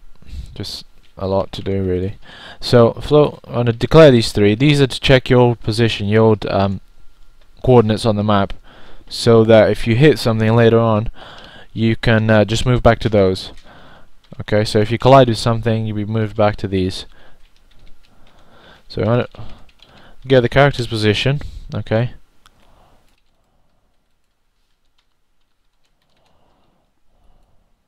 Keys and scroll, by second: 0.0-6.3 typing, 9.6-10.9 typing, 12.3-13.4 typing, 16.8-19.3 typing, 20.6-24.6 typing.